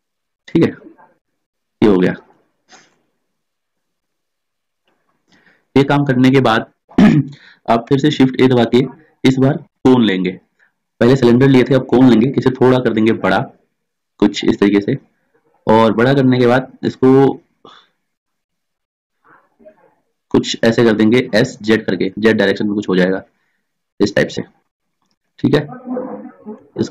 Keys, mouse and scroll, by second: 8.0 shift+a, 12.1 s, 18.2 s, 25.2-26.4 middle drag.